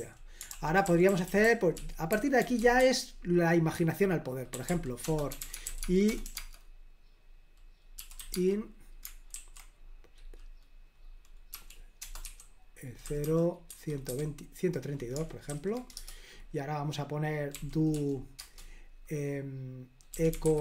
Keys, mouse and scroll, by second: 0.0-6.4 typing, 0.5 super+l, 7.8-9.4 typing, 11.6-15.5 typing, 16.0 Return, 17.6-18.0 typing, 18.4 Return, 19.9-20.6 typing.